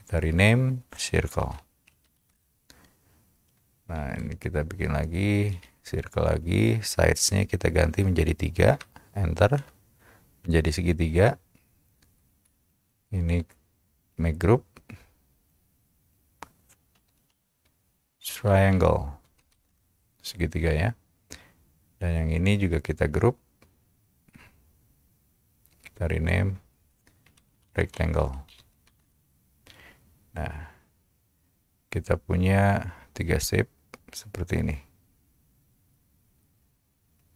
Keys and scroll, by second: 1.0-2.9 typing, 5.4-6.1 typing, 9.7 Return, 12.4 space, 17.2-20.1 typing, 27.2-29.5 typing.